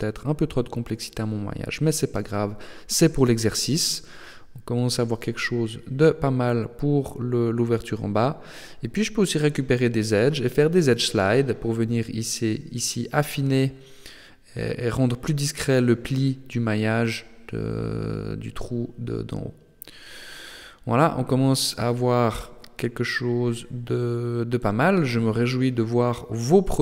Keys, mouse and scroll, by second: 0.4 Tab, 3.2 click, 5.3 click, 6.1 Tab, 7.3-8.5 scroll up 4, 8.6 alt+right click, 10.3 ctrl+e, 14.6-15.2 scroll down 5, 15.2 shift+middle click, 16.0-16.4 scroll up 3, 16.4 Tab, 18.1-18.6 scroll down 4, 19.1 middle click, 21.1 shift+middle click, 21.8 middle click, 25.6 KP_7, 26.6 shift+middle click.